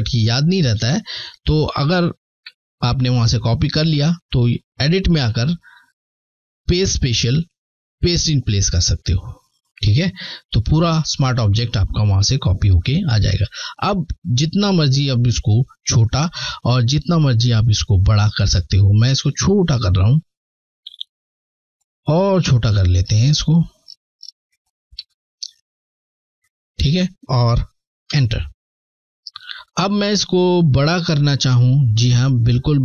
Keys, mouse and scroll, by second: 1.5 Delete, 3.8 click, 7.7 click, 12.0 alt+Num_Lock, 12.1 alt+scroll down 1, 13.8 ctrl+t, 15.5-16.0 scroll down 3, 16.6 alt+scroll down 1, 17.7 alt+shift+click, 18.1 alt+shift+click, 19.0 alt+click, 21.0 alt+shift+click, 22.1 alt+scroll up 1, 22.7-23.0 scroll up 2, 24.6 shift+click, 27.2 Return, 29.6 click, 29.7 click, 30.0 click, 31.9 ctrl+t.